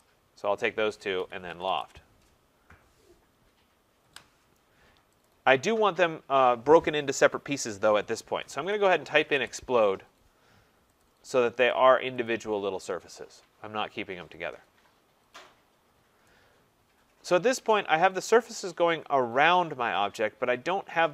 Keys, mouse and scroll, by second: 0.4 click, 1.2-1.8 typing, 3.3 Return, 4.0 Return, 5.3 click, 8.4-12.1 typing, 11.0 click, 11.7 click, 12.3 click, 15.8 middle click, 15.8 middle click, 16.0 middle click, 17.7 right click, 20.3 middle click.